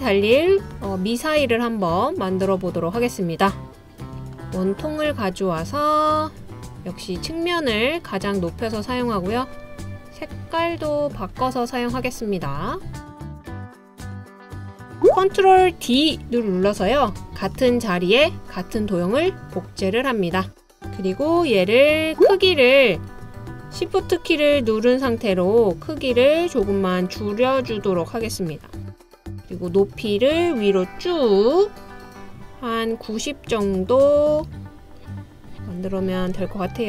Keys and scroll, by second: 16.9 super+d.